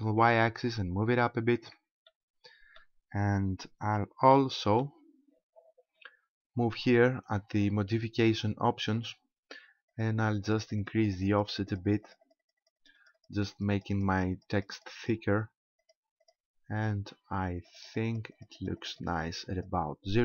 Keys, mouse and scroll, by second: 1.7 ctrl+click, 2.1 middle click, 4.3 shift+middle click, 4.9-5.9 scroll up 1, 6.9 click, 9.9 click, 10.5 click, 10.7 click, 10.8 click, 11.0 click, 11.2 click, 11.3 click, 11.5 click, 11.7 click, 11.9 click, 12.1 click, 12.3 click, 12.5 click, 12.6 click, 12.8 click, 13.0 click, 13.2 click, 13.3 click, 13.5 click, 13.7 click, 13.9 click, 14.1 click, 14.3 click, 14.5 click, 14.7 click, 15.0 click, 15.8 click, 16.2 click, 17.7 click, 17.9 click, 18.1 click, 18.3 click, 18.6 click, 18.8 click, 19.0 click, 19.5 click.